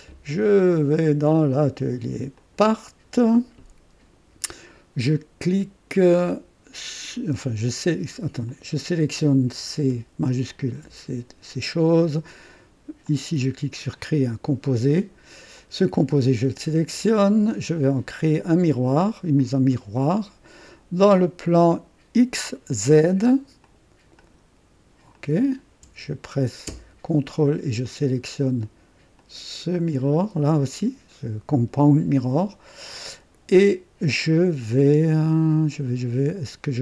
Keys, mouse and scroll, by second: 2.5 click, 8.4 click, 10.5 shift+click, 13.0 click, 13.9 click, 15.5 click, 19.3 click, 23.6 click, 24.2 click, 25.1 click, 27.8 ctrl+click, 29.2 ctrl+click, 29.7 ctrl+click.